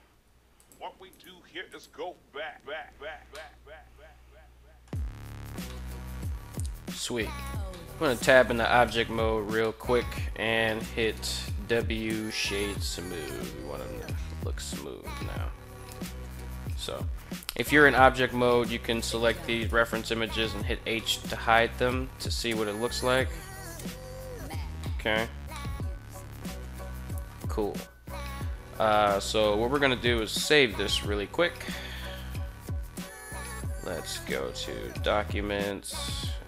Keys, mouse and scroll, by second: 0.4 click, 0.9 right click, 1.1 g, 1.5 drag, 3.2-4.7 middle drag, 5.0 a, 5.4-6.4 middle drag, 6.7-7.0 middle drag, 7.2 Tab, 7.5 middle drag, 8.1-8.9 middle drag, 9.3-9.8 middle drag, 11.2 w, 12.5-13.9 middle drag, 14.9-16.9 middle drag, 17.3 middle drag, 17.8 right click, 18.6 shift+right click, 19.3 h, 20.7-23.8 middle drag, 24.5-24.9 shift+middle drag, 25.3-26.7 middle drag, 30.1 ctrl+s.